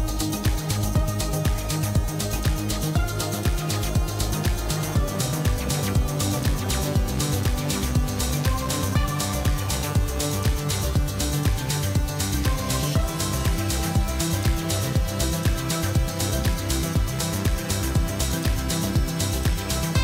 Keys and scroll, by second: 3.5 3, 5.7 i, 10.1 2, 11.8 ctrl+z, 14.4 ctrl+b, 18.1 Tab.